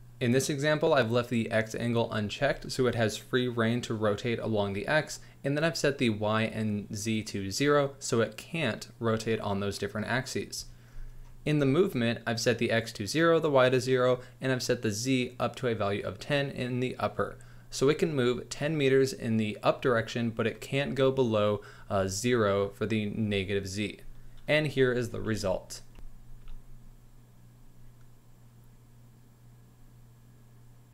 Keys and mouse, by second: 25.5 z, 25.7 z, 26.3 space.